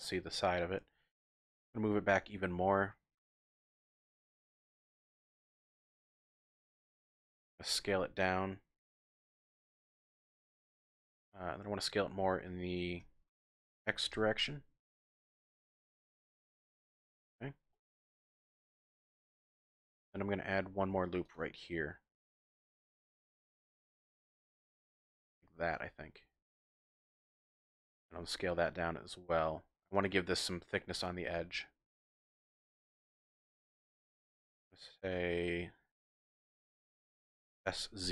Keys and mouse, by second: 1.7 g, 4.0 click, 4.3 click, 5.7 shift+click, 7.8 s, 10.5 click, 10.9-12.1 drag, 13.0 s, 14.1 x, 15.7 click, 16.0 click, 17.2 z, 17.7 click, 20.3 click, 20.8 ctrl+r, 24.7 click, 24.9 click, 28.2 s, 31.3 click, 32.4 click, 37.6 s, 38.0 z.